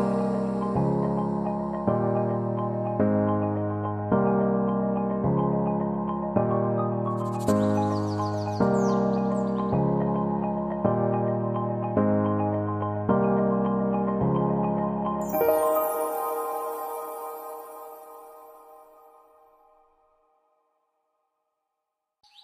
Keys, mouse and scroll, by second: 0.0-0.3 typing, 13.4 typing, 16.5 F8, 16.9 BackSpace, 18.9-21.6 typing.